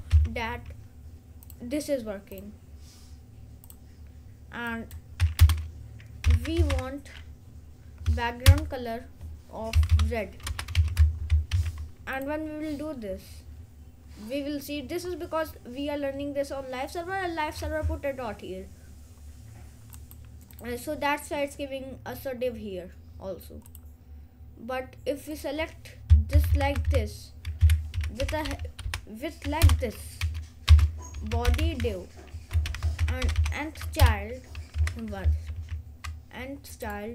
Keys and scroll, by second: 0.2 ctrl+s, 5.5 Return, 6.1-7.3 typing, 8.6 Return, 9.6-10.9 typing, 11.6 ctrl+s, 26.5 Left, 27.6 Right, 27.8-29.0 typing, 29.7 Return, 30.8-34.9 typing, 34.1 Return, 35.6 ctrl+s.